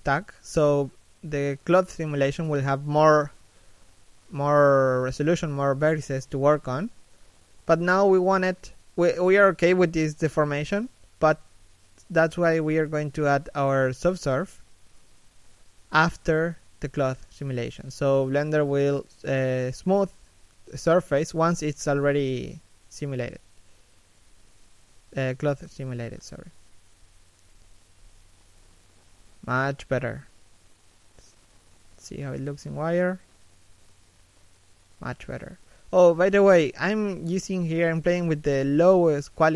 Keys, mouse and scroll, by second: 21.7 middle click, 22.3-22.7 scroll up 1, 22.7 middle click, 25.7 shift+middle click, 26.1 middle click, 27.2 shift+middle click, 27.5 middle click, 28.3-28.9 scroll up 1, 29.2 scroll down 1, 29.4 z, 29.7 scroll down 1, 30.0 z, 33.6 a, 33.9 middle click, 35.8 shift+middle click, 36.2-36.5 scroll down 1, 36.5 middle click, 39.3 right click.